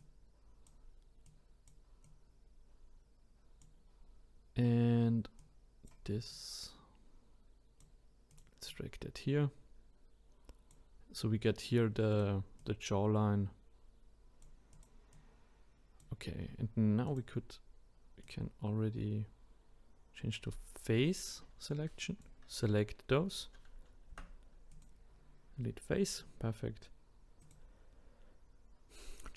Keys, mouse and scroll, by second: 0.0-2.0 drag, 2.0 click, 5.4 click, 6.3 click, 8.3 click, 8.6 click, 12.1 click, 12.6 click, 14.7 click, 15.1-17.2 drag, 18.3-21.3 drag, 24.1 Delete, 27.4 click.